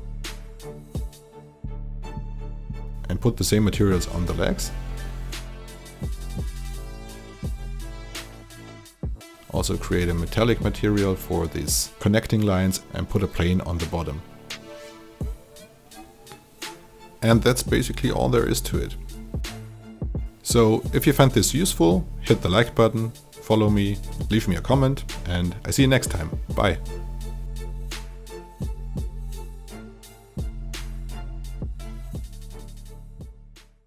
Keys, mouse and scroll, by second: 15.6 e, 15.8-18.2 drag, 18.3 t, 18.6-25.9 drag.